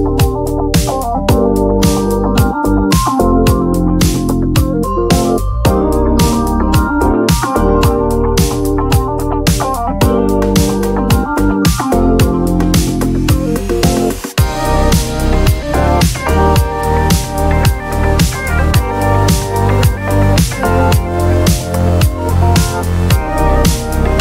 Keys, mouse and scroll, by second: 0.6 shift+click, 4.3 click, 5.0 click, 6.4 d, 7.2 click, 8.7 shift+click, 11.5 click, 13.0 click, 14.5 click, 15.7 ctrl+d, 16.6-18.7 drag, 18.7 space, 20.4 ctrl+shift+click, 21.8-23.4 ctrl+shift+drag, 23.8 click.